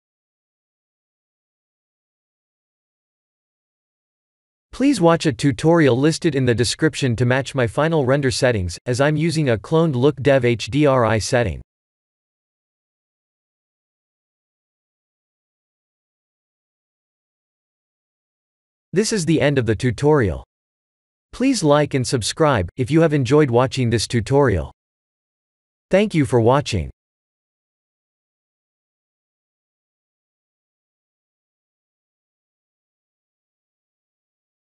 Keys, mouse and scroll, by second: 0.6 click, 2.6 click, 6.3 click, 7.5 click, 9.9 click, 14.9 click, 15.4 ctrl+s, 15.8 click.